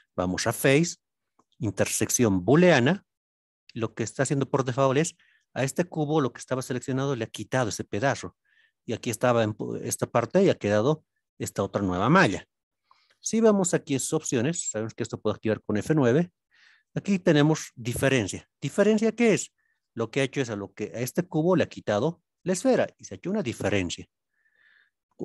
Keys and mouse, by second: 0.2-2.6 drag, 3.6-4.9 middle drag, 8.2-8.8 middle drag, 11.3-12.8 middle drag, 13.7 click, 15.2 click, 23.1-23.5 middle drag, 24.0-24.5 shift+middle drag.